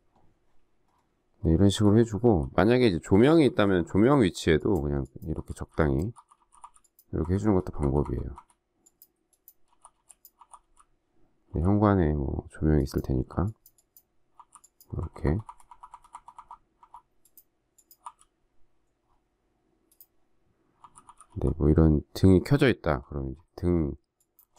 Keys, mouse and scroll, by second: 1.7-8.3 typing, 9.4-11.4 typing, 13.1 [, 14.9-16.7 typing, 17.9 [, 20.7-21.2 typing, 22.8-23.1 typing, 24.3-24.5 typing.